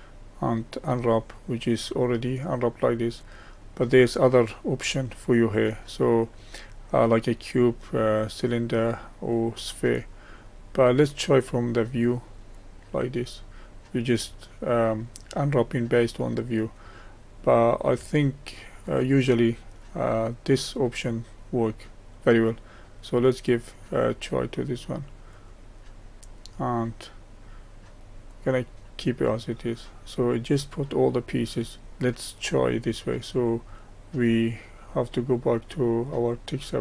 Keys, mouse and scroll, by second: 0.9 click, 2.7-12.7 drag, 28.5 click, 31.8-33.4 scroll up 1.